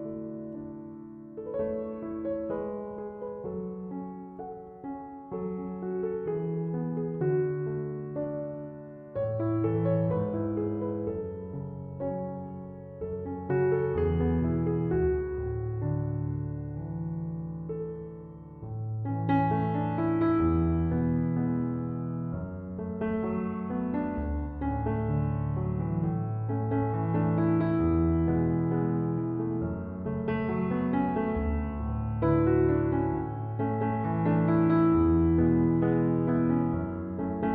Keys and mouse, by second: 14.6-36.4 drag.